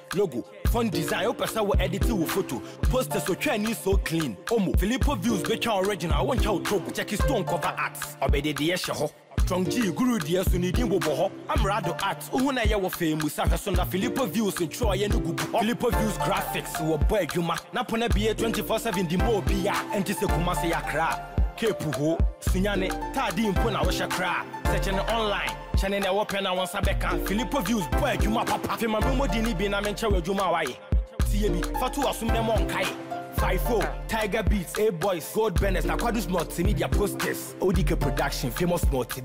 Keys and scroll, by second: 2.3 Return, 14.3 ctrl+a.